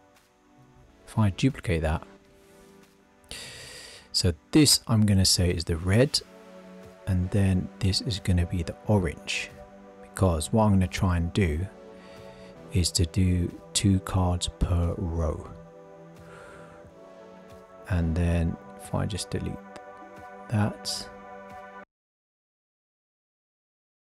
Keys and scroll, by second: 1.3 super+d.